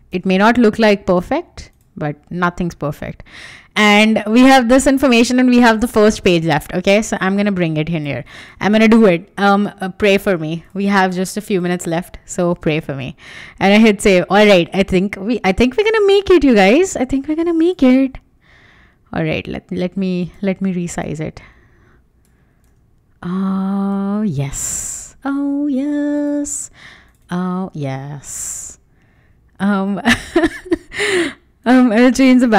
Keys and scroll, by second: 0.1 Return, 0.4 super+s, 5.5 super+Tab, 8.4 super+c, 12.4 super+v, 24.4 Return, 24.8 super+s.